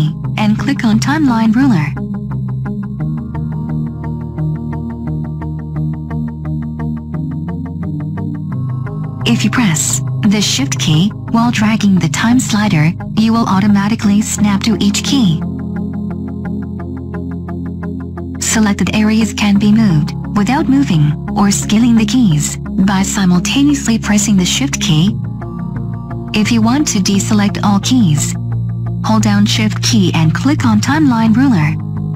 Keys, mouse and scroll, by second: 29.0 click.